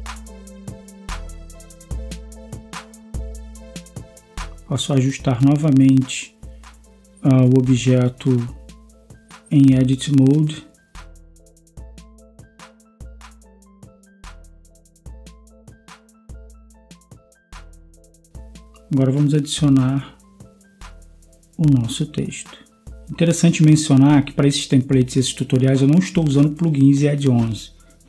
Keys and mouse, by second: 5.0 middle click, 5.6-6.5 drag, 6.5 Tab, 15.6 Tab, 18.8 click, 19.1 click, 19.9 ctrl+s.